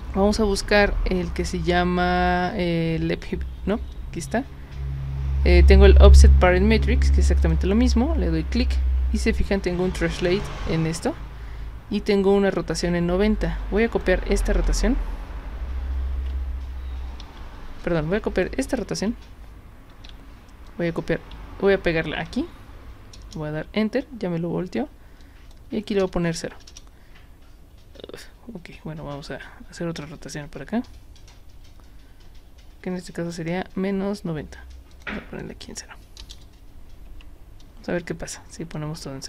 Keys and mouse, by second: 7.4 click, 13.5 click, 17.2 ctrl+c, 17.8 click, 19.9 ctrl+c, 20.7 click, 22.1 ctrl+v, 25.2 click, 30.0-33.3 drag, 34.9 click, 35.4 click, 37.1 Tab, 38.8 click.